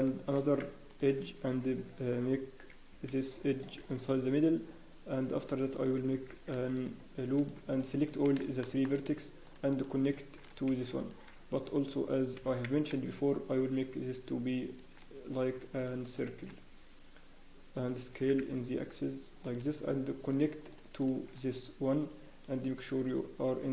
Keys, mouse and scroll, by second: 0.3 ctrl+r, 6.5 ctrl+b, 7.5 click, 8.2 shift+click, 8.6 shift+middle click, 9.4 shift+click, 11.0 Escape, 11.0 click, 12.3 g, 15.5 click, 15.7 shift+click, 18.2 s, 22.4 click, 23.0 right click.